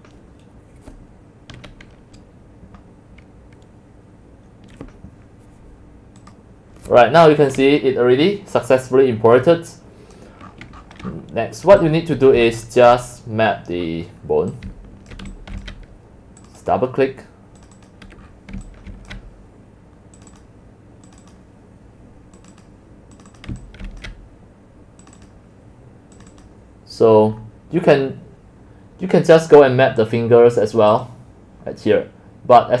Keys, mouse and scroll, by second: 6.3 click, 8.5-9.7 middle drag, 8.5-8.9 scroll, 9.8 middle click, 9.9 scroll down 8, 10.2 click, 10.5-11.7 scroll up 26, 12.3 click, 12.9 click, 13.8 scroll down 2, 13.9 middle click, 13.9-14.4 scroll, 14.7 c, 15.2 click, 15.4 x, 15.6 c, 15.8 click, 16.7-18.3 drag, 18.4 scroll down 2, 18.6 middle click, 19.2-19.9 drag, 20.4 click, 21.4-23.6 drag, 23.6 typing, 24.0 click, 25.3-26.4 drag, 27.4 scroll down 3, 27.7-29.7 middle drag, 29.7 scroll down 3, 31.1-32.8 drag.